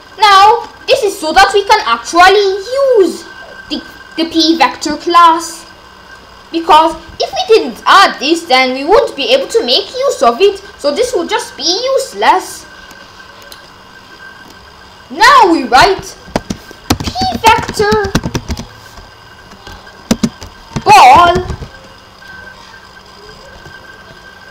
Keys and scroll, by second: 16.3 Return, 16.8-19.0 typing, 20.1-21.9 typing.